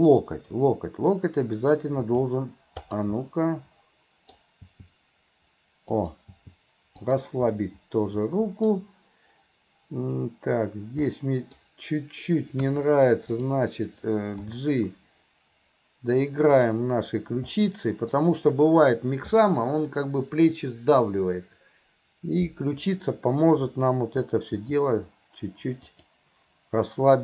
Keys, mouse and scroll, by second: 0.0-1.8 middle drag, 2.0 g, 3.3 scroll up 1, 3.4-4.4 middle drag, 4.4-4.7 scroll down 1, 4.7 g, 6.4 g, 7.6 scroll up 1, 7.7-8.7 middle drag, 11.1 scroll up 1, 11.2-11.6 middle drag, 11.6 scroll down 1, 13.4 click, 14.4 g, 17.6 scroll up 1, 17.7 middle click, 22.9-23.4 scroll up 1, 23.4 scroll down 1, 24.6 g.